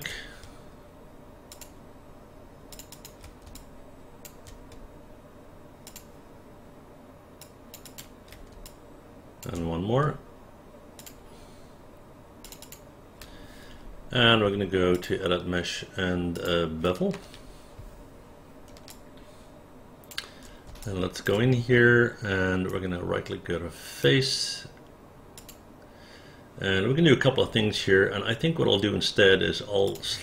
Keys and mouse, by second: 1.5 shift+click, 2.7 shift+click, 2.9 shift+click, 3.6 alt+click, 5.9 shift+click, 7.4 shift+click, 7.8 shift+click, 8.7 alt+click, 11.0 shift+click, 12.4 shift+click, 12.6 shift+click, 18.9-20.1 alt+drag, 20.8 alt+click, 22.7-24.0 right drag, 25.4 click, 29.9 click.